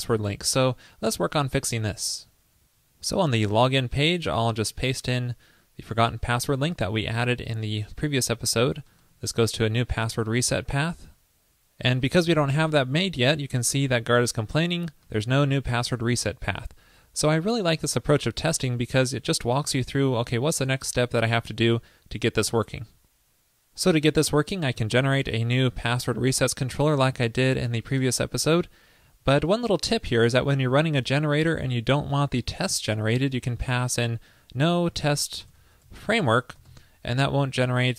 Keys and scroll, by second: 4.8 super+v, 10.8 super+s, 24.8 super+v.